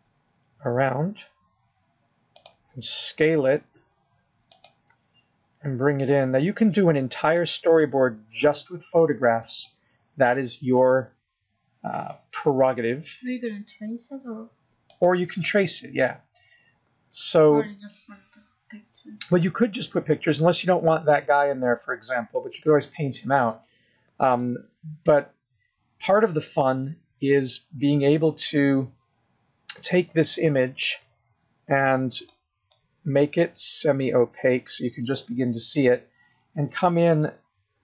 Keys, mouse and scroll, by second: 0.2 g, 1.9 g, 5.1 s, 6.8 g, 10.0 s, 12.9 s, 17.3-18.8 scroll up 2, 18.8-19.8 scroll up 2, 19.8 scroll down 2, 24.4-25.4 scroll up 1, 25.4 scroll up 1, 25.5 shift+middle click, 26.7-27.4 scroll up 1, 34.1 click, 34.6 click, 37.5-37.8 scroll up 4.